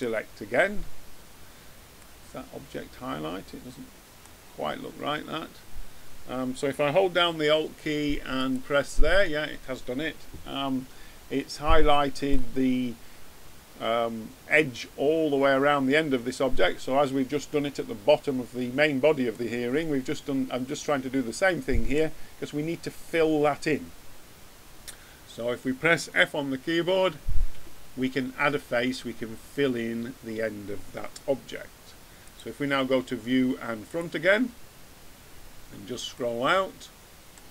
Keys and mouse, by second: 1.9 middle click, 2.9 middle click, 4.7-10.1 middle drag, 11.3-13.3 middle drag, 19.2 middle click, 27.5 f, 32.2-33.9 drag, 35.3 middle click.